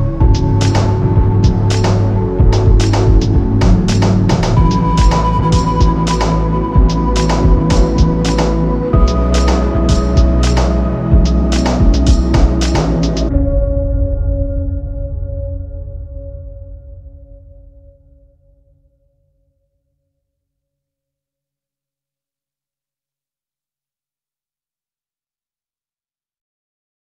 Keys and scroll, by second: 2.2 Escape, 10.3 4, 10.6 Return, 11.6 Return, 12.0 Escape, 13.6 F3, 14.3 Escape.